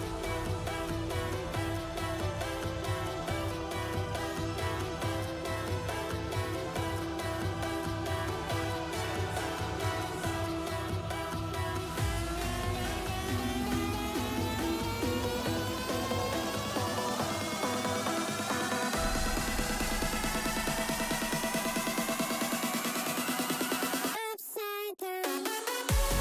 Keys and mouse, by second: 0.1 Tab, 0.6 KP_1, 1.4 shift+click, 1.8 s, 3.8 ctrl+a, 4.6 click, 4.9 click, 5.4 Tab, 5.6 middle click, 5.9 3, 6.7 middle click, 7.5 click, 7.8 middle click, 8.7 ctrl+click, 9.1 click, 9.6 KP_1, 10.4 alt+s, 13.9 Tab, 14.1 click, 14.3-14.7 middle drag, 14.9 click, 15.7 click, 16.2 Tab, 16.5 click, 17.1 KP_1, 18.0 ctrl+r, 19.9 ctrl+r, 21.5 z, 22.1 1, 22.8 click, 23.5 s, 25.4 click, 26.0 s.